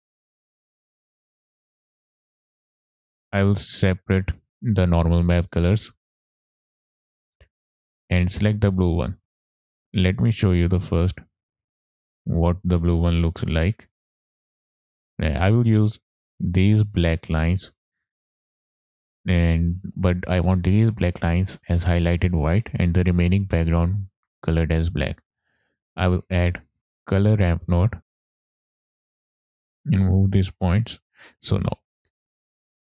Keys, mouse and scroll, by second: 0.1-0.8 drag, 1.2-2.2 middle drag, 2.7 middle click, 2.9 click, 2.9 scroll up 3, 3.7-6.1 drag, 7.6 click, 7.9 scroll up 2, 8.2 middle click, 9.0-9.8 scroll down 4, 9.2 middle click, 9.8 middle click, 10.4 drag, 11.1 click, 11.9 middle click, 12.2 scroll up 2, 13.2 ctrl+shift+click, 13.8 ctrl+shift+click, 24.2 middle click, 24.7-25.3 scroll up 3, 25.0 middle click, 25.5 click, 25.8 shift+a, 29.4 drag, 29.8-30.4 drag, 31.0 click.